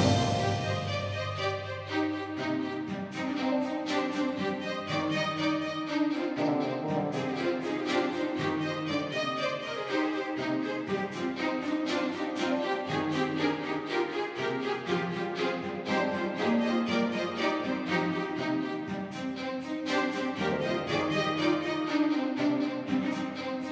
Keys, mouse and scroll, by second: 2.4 KP_1, 3.7-5.4 drag, 4.8 middle click, 5.2 right click, 5.4 middle click, 5.5 click, 5.5-8.1 right drag, 6.5-7.5 middle drag, 7.5 r, 8.9 g, 13.3-15.6 right drag, 14.2 g, 17.0 r, 19.0-20.8 drag, 19.9 r, 20.8-22.3 middle drag.